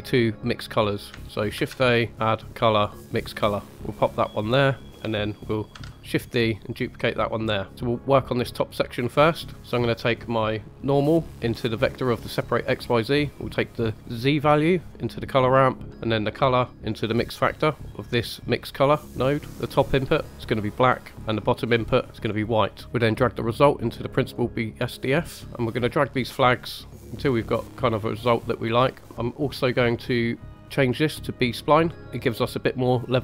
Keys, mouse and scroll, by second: 1.5 shift+a, 4.8 middle drag, 5.7 shift+d, 6.7 click, 7.7 middle click, 9.4-10.5 scroll up 3, 10.5 click, 11.3 click, 13.1-14.8 drag, 15.9-18.0 drag, 19.4 click, 21.4 click, 22.6 middle click, 22.8 drag, 23.4 click, 25.4 middle click, 25.4 scroll up 1, 26.3-26.7 drag, 26.9 drag, 28.2-28.9 drag, 30.5-31.6 drag.